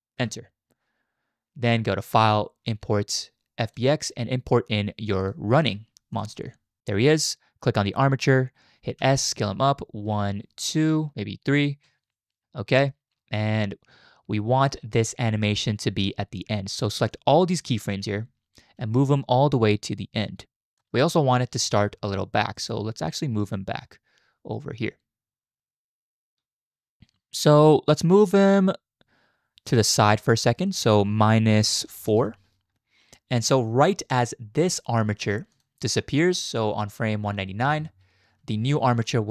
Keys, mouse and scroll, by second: 2.0-3.8 drag, 7.9 click, 9.0 s, 17.2-18.1 drag, 18.8 g, 21.7 shift+middle click, 22.6 shift+middle click, 23.6-27.0 drag, 29.7 click, 30.7-32.2 drag, 35.5 click, 37.7 Right.